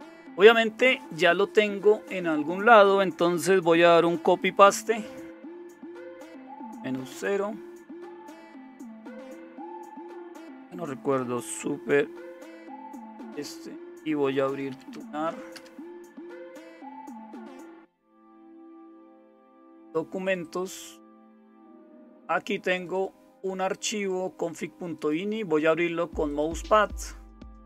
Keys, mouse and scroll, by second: 7.1 super+0, 13.0 super+space, 14.1-15.4 typing, 15.5 Return.